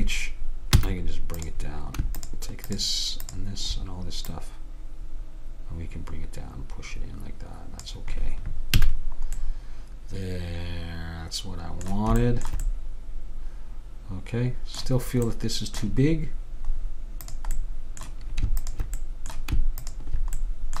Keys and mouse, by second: 0.8 a, 1.5-6.3 drag, 8.8 a, 9.5 click, 12.4-14.7 middle drag, 15.5-18.7 middle drag, 17.3-20.8 drag.